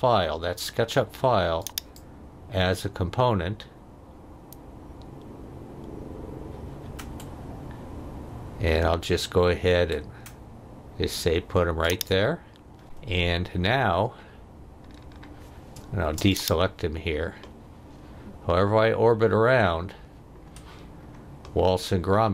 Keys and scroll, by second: 15.8 space.